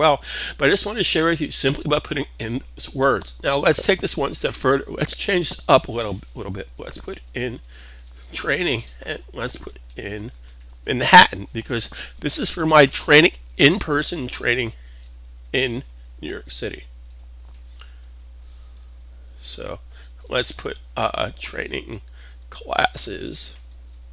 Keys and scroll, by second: 6.4-10.6 typing, 23.7-24.1 typing.